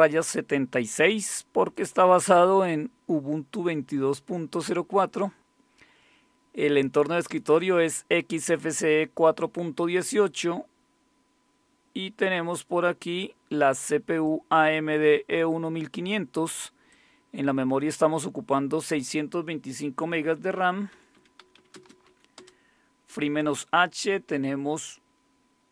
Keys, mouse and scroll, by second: 1.7-3.6 drag, 8.3 click, 14.2-15.9 drag, 16.9-18.2 drag, 18.9 click, 20.7-22.6 typing.